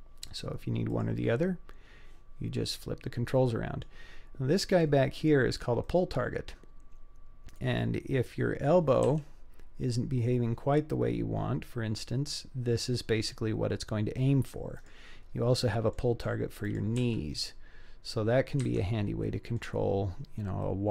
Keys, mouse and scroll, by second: 0.9 click, 2.8-3.8 middle drag, 4.7 click, 5.4 scroll down 2, 5.8-8.7 middle drag, 9.1 g, 15.2-15.7 scroll down 2, 15.7-16.0 middle drag, 16.7 click, 17.0 g, 19.3-19.6 middle drag, 20.1-20.9 scroll up 3, 20.7-20.9 middle drag.